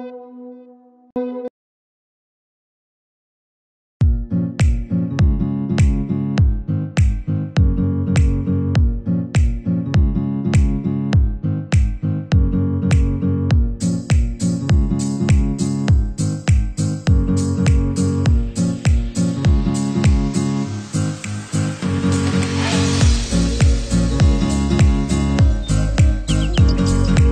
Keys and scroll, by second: 1.7 ctrl+z, 14.8 ctrl+=.